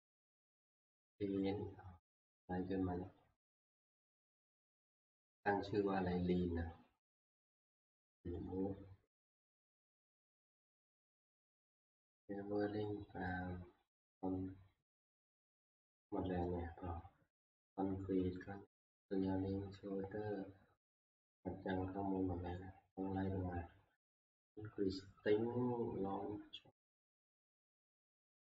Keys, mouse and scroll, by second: 2.4 scroll, 7.6 scroll, 10.9-11.3 scroll, 14.7-15.8 scroll, 15.8 scroll, 20.5 scroll, 20.7 scroll up 5, 21.3 scroll up 2, 21.8-22.5 scroll down 5, 22.6 scroll.